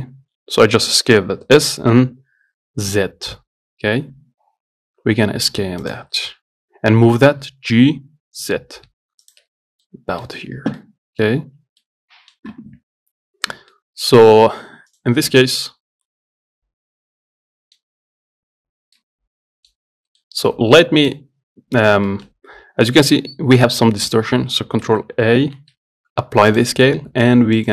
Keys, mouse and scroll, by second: 0.1-1.8 scroll up 1, 1.8 s, 7.2 g, 9.8 scroll down 1, 10.1 middle click, 10.6-11.0 scroll up 2, 11.0-15.2 middle drag, 15.2 click, 15.7-18.4 middle drag, 19.2-20.3 middle drag, 20.3 scroll down 1, 20.5 middle click, 21.3 click, 22.0-22.3 scroll up 2, 22.3-25.8 shift+middle drag, 25.8 ctrl+a.